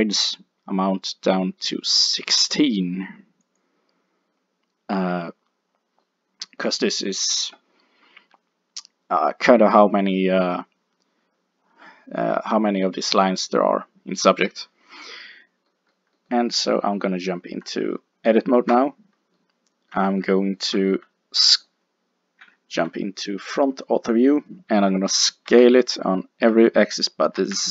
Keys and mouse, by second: 6.0-9.2 middle drag, 15.7-18.7 middle drag, 18.7 Tab, 22.4 KP_1, 22.8 KP_5, 25.5 s.